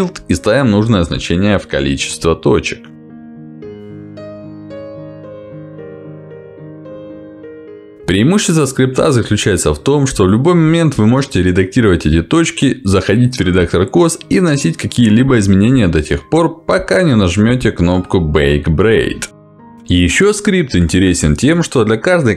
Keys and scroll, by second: 2.8 b, 5.9 b.